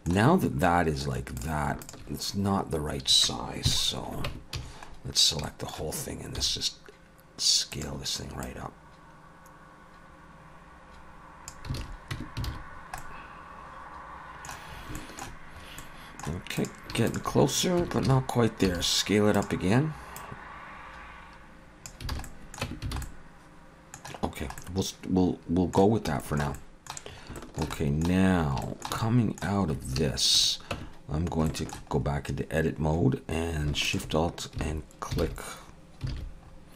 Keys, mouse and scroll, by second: 0.6 middle click, 1.4 click, 1.8 shift+click, 3.7 KP_3, 4.3 Tab, 4.6 a, 4.9-5.4 scroll down 2, 5.4 shift+middle click, 6.4 s, 8.4 click, 11.8 alt+a, 12.1 Tab, 12.5 alt+a, 12.7-13.8 scroll down 2, 13.0 middle click, 15.0 shift+middle click, 15.6 scroll up 1, 15.8 middle click, 16.6 click, 17.1 shift+click, 17.8 Tab, 18.1 a, 18.7 s, 20.2 click, 22.1 alt+a, 22.2 middle click, 22.6 Tab, 22.9 alt+a, 23.0 middle click, 24.3 scroll down 1, 24.6 middle click, 26.2 shift+middle click, 26.5 middle click, 27.1 scroll up 2, 27.4 shift+middle click, 27.7 middle click, 28.3-28.6 scroll up 2, 28.6 shift+middle click, 29.0 middle click, 29.6-30.0 scroll up 2, 30.3 shift+click, 30.7 Tab, 31.5 shift+middle click, 31.9 scroll up 1, 32.7-33.5 scroll up 3, 34.1 alt+shift+click, 36.1 alt+a, 36.4-36.7 scroll up 2.